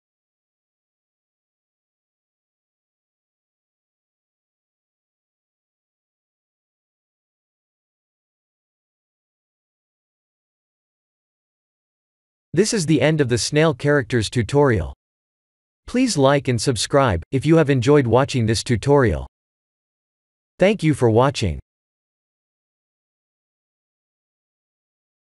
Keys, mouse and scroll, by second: 8.4 click.